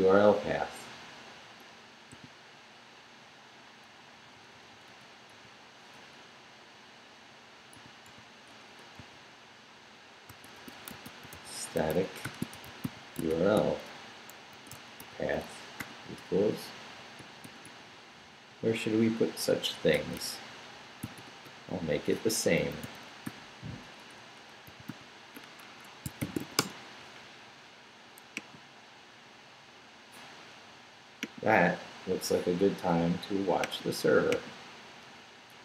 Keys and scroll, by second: 2.1 i, 3.9 Right, 7.7 i, 8.5 BackSpace, 9.0 ., 10.3-15.8 typing, 17.4 shift+', 18.5 shift+Left, 19.0 Left, 19.5 Right, 19.9 BackSpace, 21.0-26.9 typing, 21.5 Left, 25.6 Escape.